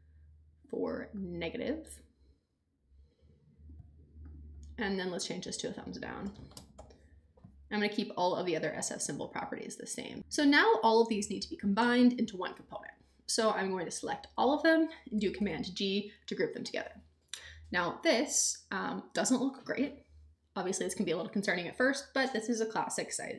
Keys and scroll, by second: 6.0-7.2 typing, 15.4 super+g.